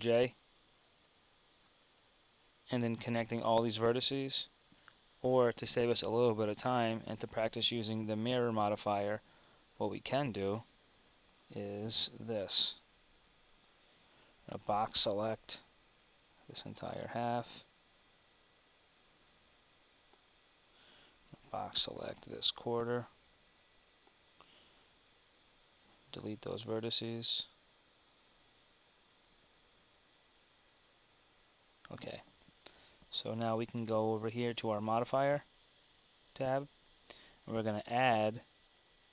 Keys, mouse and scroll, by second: 0.0 ctrl+j, 1.2 z, 1.8 Tab, 1.9 z, 2.4 z, 6.2 KP_1, 10.8 a, 11.6 KP_7, 14.2 b, 21.2 b, 30.0 KP_1, 32.4 Tab.